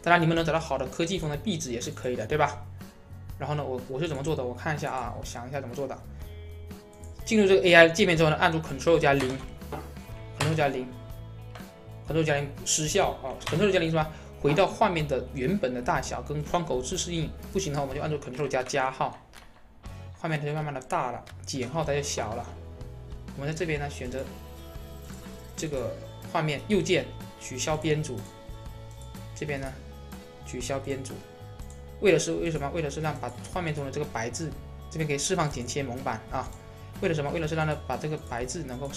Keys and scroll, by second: 8.3 ctrl+0, 18.3 ctrl++.